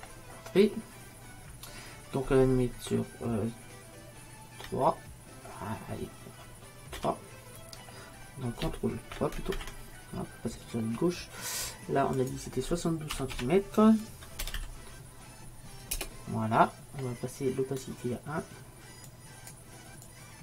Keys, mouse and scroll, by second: 0.0 Return, 12.3-14.0 drag, 19.1-20.4 drag.